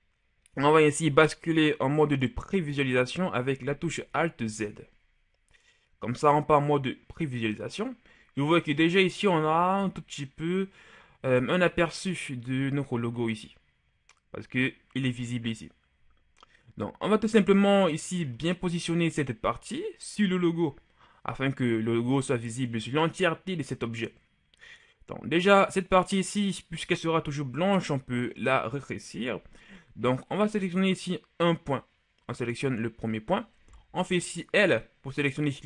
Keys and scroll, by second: 4.4 alt+z, 34.1 l.